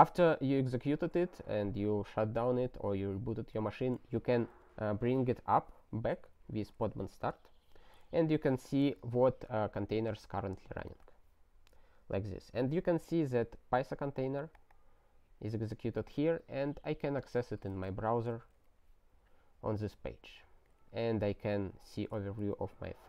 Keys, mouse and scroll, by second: 4.1 ctrl+n, 4.4 ctrl+space, 4.5 ctrl+a, 6.5 ctrl+g, 8.2 ctrl+n, 8.4 ctrl+space, 8.5 ctrl+e, 9.0 alt+w, 9.8 ctrl+d, 10.6 ctrl+y, 11.0 Return, 14.4 click, 14.5 double click, 14.7 click, 15.9 click.